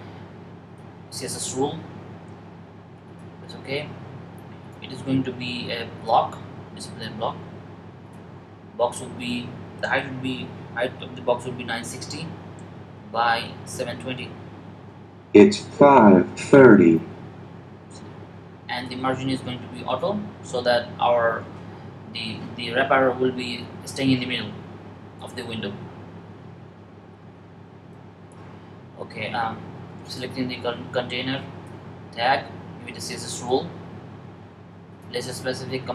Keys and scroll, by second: 11.0-12.1 typing, 14.6 typing, 17.2-17.9 typing.